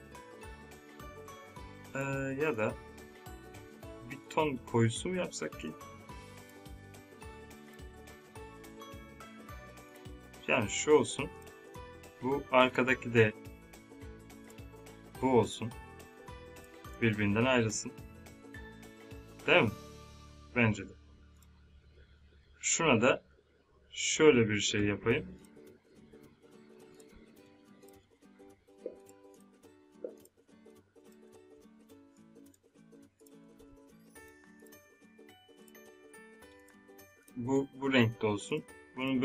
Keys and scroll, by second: 31.3 ctrl+Num_Lock.